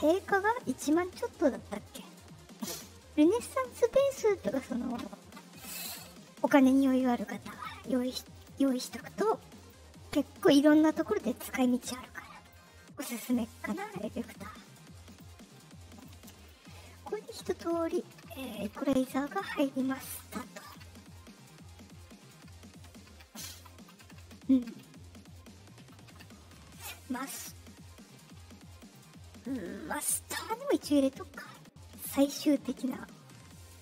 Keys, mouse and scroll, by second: 4.3 click, 6.7 click, 7.1 click, 7.5 click, 8.3 click, 8.9 click, 9.5 click, 10.8 click, 11.6 click, 15.0 click, 15.9 click, 16.3 click, 20.8 Left, 22.5 click, 28.7 click.